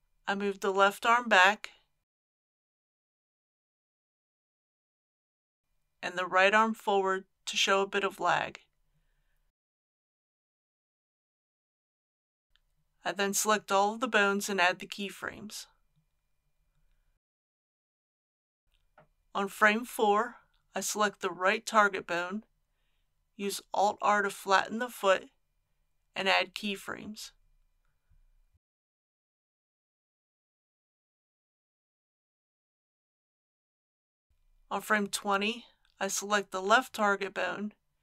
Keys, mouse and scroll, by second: 1.1 click, 1.8 r, 2.2 x, 4.3 click, 4.8 middle click, 6.3 click, 7.8 r, 8.2 x, 11.1 click, 12.8 a, 13.3 i, 13.8 click, 14.5 scroll down 1, 15.9 click, 18.6 Left, 18.7 middle click, 19.3-20.3 scroll up 1, 20.4-21.5 drag, 24.5 alt+r, 27.8 a, 28.1-28.9 scroll down 1, 28.9-29.7 scroll down 1, 29.7-34.5 drag, 35.2 scroll up 1, 35.2-36.5 middle drag, 37.4 click.